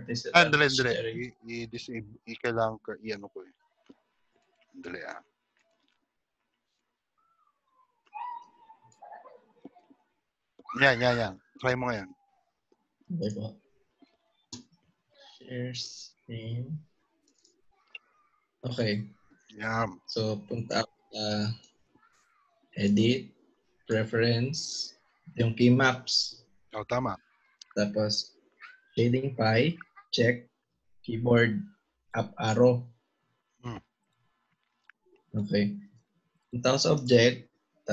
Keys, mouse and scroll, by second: 12.1 click.